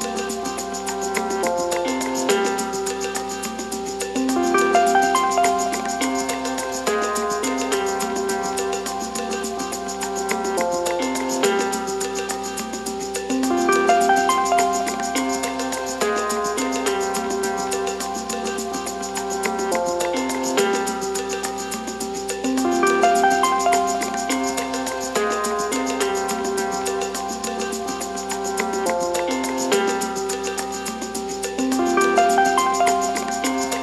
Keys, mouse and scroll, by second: 1.3 click, 1.8-2.2 scroll up 1, 2.2 2, 2.4 click, 2.6 scroll up 1, 2.7 middle click, 3.6 ctrl+click, 3.9 middle click, 4.7 ctrl+click, 5.0 middle click, 5.5 ctrl+click, 5.9-7.2 middle drag, 7.2 ctrl+click, 7.5 middle click, 8.3 ctrl+click, 8.8-11.3 middle drag, 11.3 shift+d, 12.1 p, 12.7 Tab, 13.9 click, 14.5 middle click, 15.0 Tab, 15.6 a, 15.8-16.3 scroll down 1, 16.3-17.2 scroll down 1, 17.2 e, 20.2-21.0 scroll up 1, 21.0 shift+middle click, 21.9 r, 25.0 g, 29.5 2, 29.7 click, 30.0 alt+click, 31.5 s, 33.7 a.